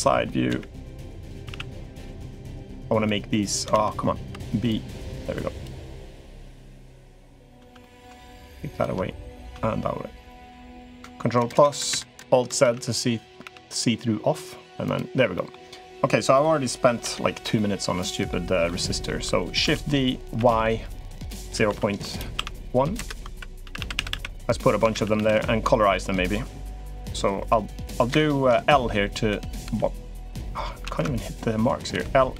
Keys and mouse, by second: 0.2 KP_1, 1.1 a, 1.3 a, 1.6 b, 3.5 ctrl+z, 4.0 b, 6.2 click, 6.9 click, 7.6 middle click, 8.5 shift+click, 10.0 shift+click, 11.1 ctrl+KP_Add, 12.1 ctrl+KP_Add, 12.4 alt+z, 13.2 g, 15.1 click, 16.8 l, 17.3 click, 18.4 click, 19.4 shift+d, 23.1-24.9 typing, 25.2 click, 26.0 click, 26.7 click, 27.1 k, 29.1 l, 29.4 l, 30.6 ctrl+z, 30.8 ctrl+z, 31.7 l, 32.1 l.